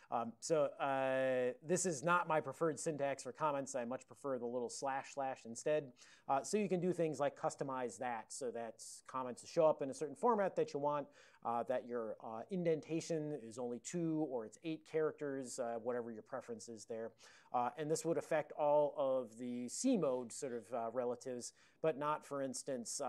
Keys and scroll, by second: 0.0 ctrl+e, 0.3 ctrl+b, 0.5 ctrl+b, 0.6 ctrl+b, 1.7 ctrl+b, 3.7 ctrl+n, 3.9 ctrl+a, 6.1 super+j.